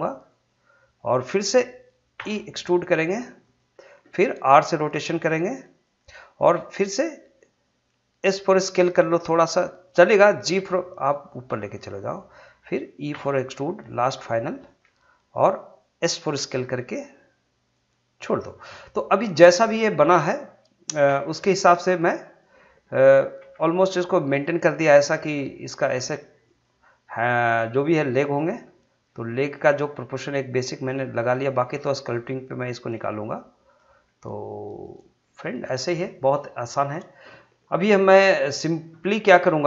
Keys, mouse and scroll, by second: 0.3 click, 2.2 e, 3.4 click, 4.5 r, 5.8 click, 10.5 g, 11.6 click, 13.1 e, 14.6 click, 16.3 s, 17.7 click, 21.1 1, 21.5-23.4 drag, 23.4 g, 24.6 click, 25.9 g, 26.4 click, 28.4 g, 29.4 click, 30.7 g, 31.2 click, 32.2 g, 32.8 click, 33.9 g, 34.7 click, 38.0-39.6 drag.